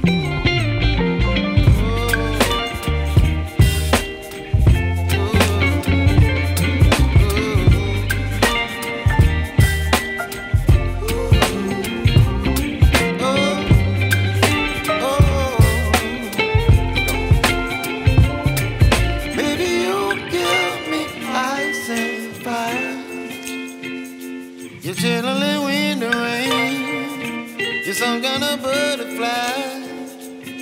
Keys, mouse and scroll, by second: 0.6-1.1 scroll up 1, 1.6 click, 3.1 right click, 4.5 click, 7.1 right click, 9.1 click, 10.1 right click, 11.3 right click, 12.6 ctrl+shift+click, 12.9 right click, 14.2 ctrl+shift+click, 15.2 right click, 16.3 click, 17.5 right click, 18.7 scroll down 1, 18.9 right click, 19.3-19.7 scroll up 1, 20.2 ctrl+shift+click, 20.5 right click, 22.1 ctrl+shift+click, 22.4 right click, 23.6 ctrl+shift+click, 24.0 right click, 25.8-27.6 drag, 28.9 ctrl+shift+click, 30.0 ctrl+shift+click.